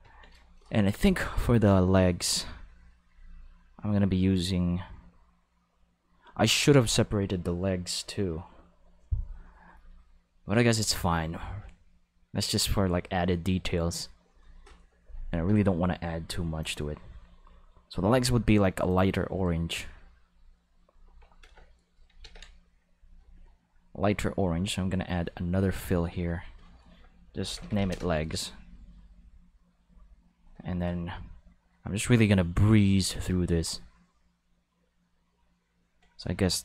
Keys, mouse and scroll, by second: 2.3 click, 3.1 click, 14.3 click, 16.6 click, 18.9 click, 21.4 Home, 22.2 ctrl+s, 23.2 click, 24.3 click, 25.7 click, 26.1 click, 27.5 l, 27.6 e, 27.7 g, 27.8 s, 29.2 click, 29.8 click, 30.3 click, 32.2-36.4 drag, 36.5 click.